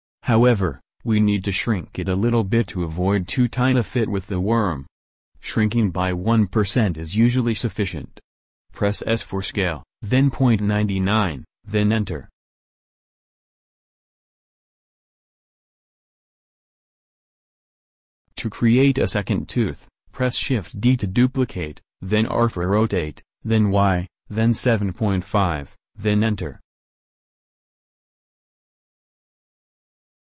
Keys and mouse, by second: 3.7-10.5 middle drag, 9.1 s, 21.2 shift+d.